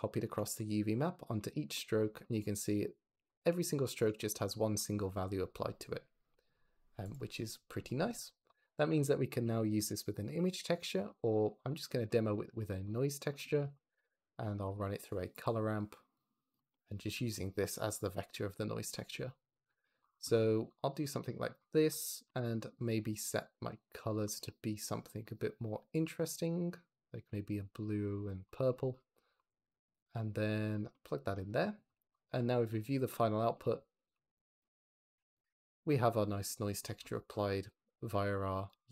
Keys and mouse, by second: 8.0 g, 8.6 shift+a, 11.6 click, 12.8 click, 13.5 shift+a, 16.1-16.4 drag, 17.2 click, 18.5 click, 19.2 click, 20.9 g, 22.1 ctrl+c, 23.3 click, 23.7 click, 24.2 ctrl+v, 24.7 click, 25.2 drag, 29.4 click, 32.1 ctrl+shift+click, 33.8 shift+click, 34.5-35.0 drag, 35.0 shift+middle drag, 35.9 click, 36.2 click, 38.4 shift+middle click, 38.6-38.9 shift+drag.